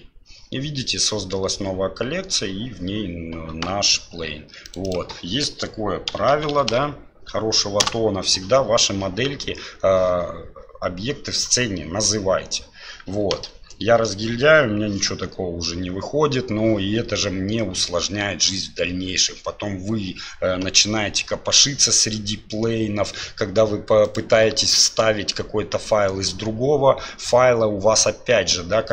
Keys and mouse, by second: 4.6 click, 13.4-14.0 middle drag.